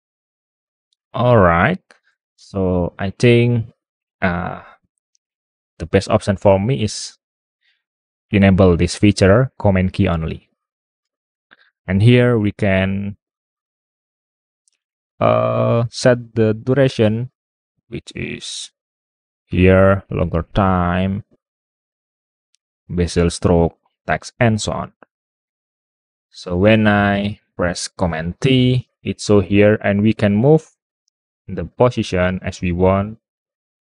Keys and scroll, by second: 0.3-1.7 typing, 29.3 super+t.